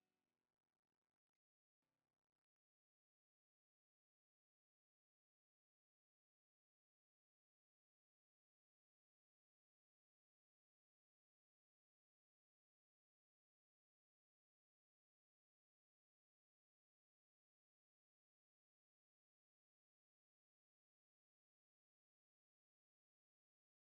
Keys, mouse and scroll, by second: 3.0 KP_Divide, 5.3 KP_Divide, 6.4 KP_Divide, 6.7 Tab, 7.3 shift+click, 8.1 KP_Divide, 9.1 click, 9.7 click, 9.9 Tab, 10.5 s, 12.3 g, 14.5 KP_7, 16.8 KP_Divide, 17.2 Tab, 17.6 scroll down 1, 17.7-18.9 middle drag, 18.9-19.3 scroll up 1, 19.3 shift+middle click, 19.6 Tab, 20.2 s, 23.5 scroll down 2, 23.6 Tab.